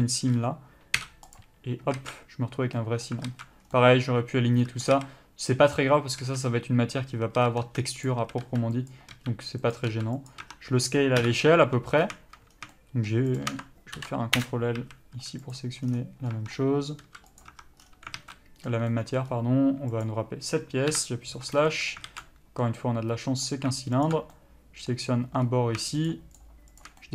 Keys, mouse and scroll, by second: 0.0 middle click, 1.6 u, 2.2 alt+a, 3.0 middle click, 3.5 alt+a, 3.9 scroll down 1, 3.9 middle click, 5.1 a, 8.3 click, 8.4 a, 8.6 s, 10.6 Tab, 11.4 KP_Divide, 12.1 scroll up 1, 12.9 shift+middle click, 13.6 shift+click, 14.6 ctrl+l, 14.7 Return, 15.0 a, 15.7 click, 16.0 scroll down 1, 16.5 scroll up 1, 16.5 Tab, 17.2 s, 17.7 Tab, 18.0 scroll down 1, 18.4 alt+a, 18.5 middle click, 19.5 scroll up 1, 20.3 click, 21.1 KP_Divide, 21.6 Tab, 21.9 middle click, 22.3 alt+a, 23.0 middle click, 24.3 alt+click, 24.6 middle click, 25.6 scroll up 1, 26.3 shift+click.